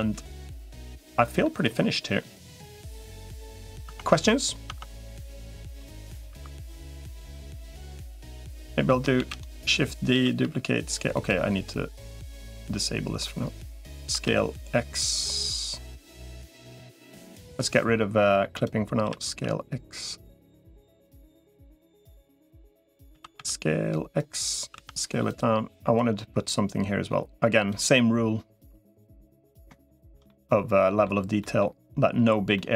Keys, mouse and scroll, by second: 0.9 middle click, 2.4-3.6 middle drag, 3.8 Tab, 4.8 Tab, 4.8 click, 6.6 3, 6.8-8.0 middle drag, 9.2 shift+d, 10.0 s, 14.0 s, 18.4 click, 18.8 s, 21.6-22.8 drag, 23.0 s, 24.6 s, 25.8-27.6 drag, 29.0 click, 29.7 shift+middle click, 30.1 click, 30.2 middle click, 31.2 middle click, 32.4 middle click.